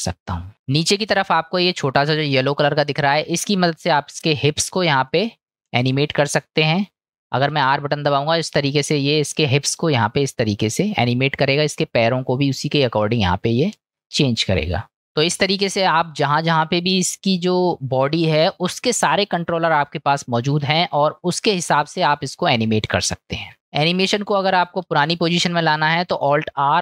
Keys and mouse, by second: 0.5-1.5 middle drag, 2.1 click, 2.9-4.5 middle drag, 5.1-5.8 middle drag, 14.0 drag, 14.4 middle click, 15.0 ctrl+z, 15.6-16.3 middle drag, 17.2-19.8 middle drag, 20.9-22.1 middle drag.